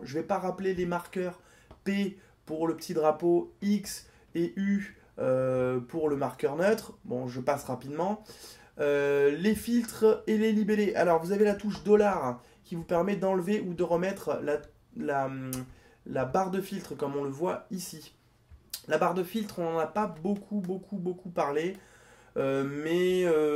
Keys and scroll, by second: 11.7 $.